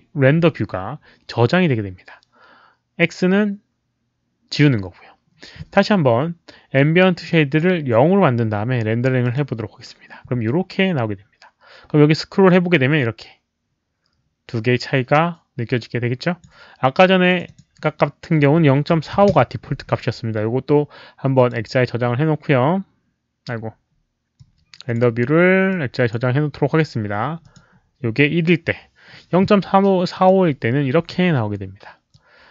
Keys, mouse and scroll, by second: 7.2 click, 9.2 click, 12.4-16.4 drag, 17.2 click, 17.4 click, 18.4 KP_Decimal, 18.9 KP_4, 19.0 KP_5, 19.3 Return, 21.3 click, 24.3-24.9 drag, 25.6-26.1 drag, 27.4 click, 30.1 click, 32.1-32.5 drag.